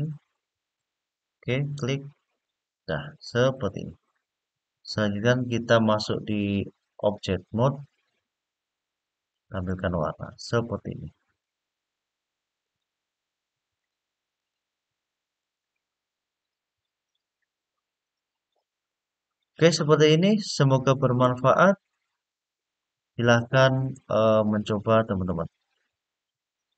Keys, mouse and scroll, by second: 1.3 click, 2.0 click, 6.1-7.0 drag, 9.1 click, 10.1-11.1 middle drag, 12.3-15.8 drag, 16.5-17.4 scroll down 2, 17.4-18.3 scroll up 3, 18.3-20.2 middle drag, 20.9-23.7 middle drag, 24.2 scroll up 2, 24.8-26.4 scroll down 2.